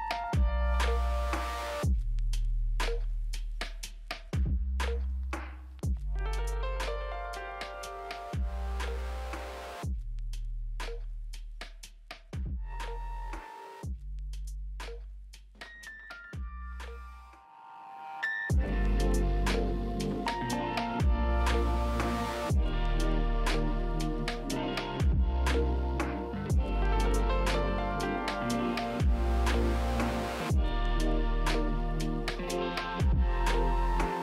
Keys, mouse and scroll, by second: 14.8 alt+w, 15.7 scroll down 4, 16.2 middle click, 17.0 p, 17.6 scroll down 3, 18.1 middle click, 27.4 scroll up 1.